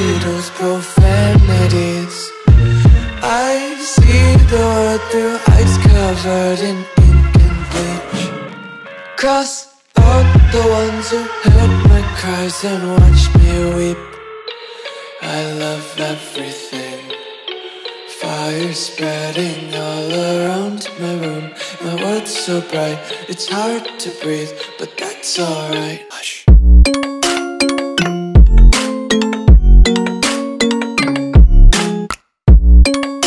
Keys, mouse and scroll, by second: 9.8 Delete, 12.7 ctrl+z, 14.1 click, 15.4 super+e, 17.0 click, 19.5 scroll down 1, 20.3 click.